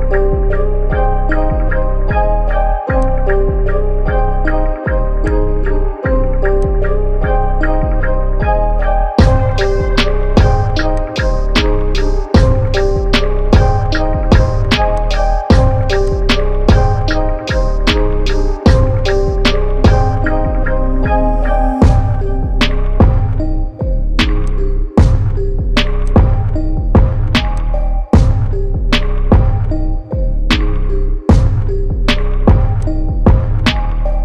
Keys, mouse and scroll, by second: 1.0-10.9 drag, 10.9-20.8 alt+drag, 20.8 Return, 23.7 w, 24.5 click, 30.8 ctrl+z, 32.7 click, 33.6 ctrl+z.